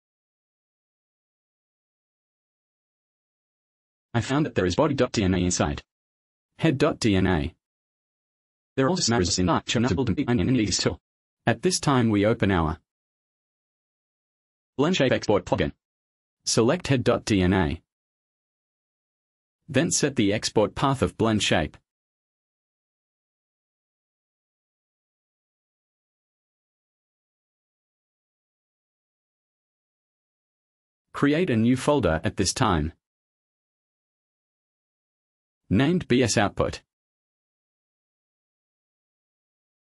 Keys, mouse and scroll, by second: 4.0 click, 6.1 click, 6.6 click, 7.5 click, 10.0 click, 11.3 click, 12.6 click, 14.6 click, 15.3 click, 16.7 click, 17.3 click, 19.2 click, 23.2 click, 24.4 click, 26.3 click, 26.7 right click, 30.2 click, 32.7 shift+o, 33.8-36.4 typing, 38.3 Left, 39.0-39.8 typing.